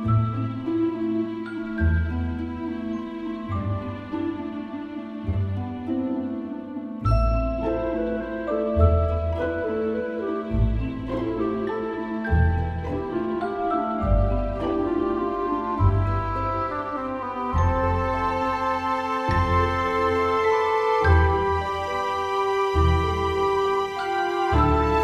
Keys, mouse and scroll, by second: 0.0 KP_1, 1.0 middle click, 2.1 a, 2.5 a, 6.5-8.9 middle drag, 8.9 KP_1, 10.4 e, 11.7 KP_1, 12.8 e, 13.4 e, 13.4 s, 15.5 ctrl+Tab, 22.0 KP_1, 22.7-24.8 middle drag, 24.8 right click.